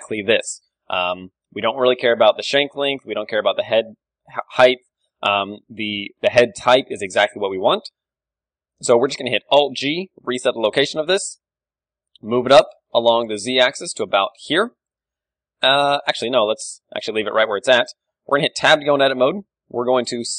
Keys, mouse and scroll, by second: 0.6-3.6 middle drag, 1.3 KP_1, 9.6 alt+g, 10.0-12.4 middle drag, 10.2 z, 11.5 g, 14.2 click, 14.6-19.8 middle drag, 16.7 ctrl+z, 18.6 Tab, 19.4 s, 20.0-20.3 right drag.